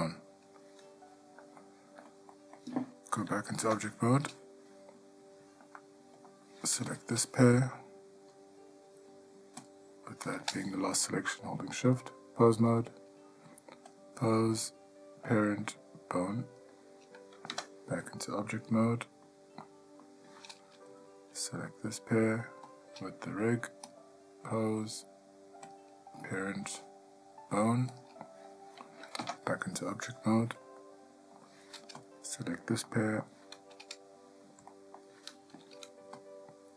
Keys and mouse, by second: 1.8-2.3 ctrl+middle drag, 2.5 middle drag, 3.8 Tab, 6.0-6.5 shift+middle drag, 7.1 click, 12.3-12.9 drag, 14.1-16.8 drag, 17.7 Tab, 19.0-19.4 middle drag, 19.8-20.2 middle drag, 21.1 click, 24.1-25.0 drag, 25.9-28.2 drag, 29.4 Tab, 31.0-31.6 shift+middle drag, 32.2 click, 33.1-33.6 middle drag, 34.9 middle drag.